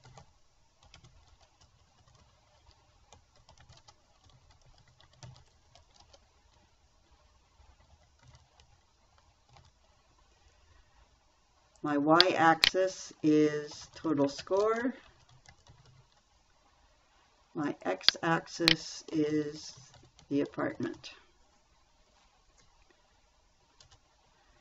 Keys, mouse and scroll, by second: 0.0-2.0 typing, 3.3-6.7 typing, 8.1-10.5 typing, 14.0-16.8 typing, 19.4-21.7 typing, 24.2 Return.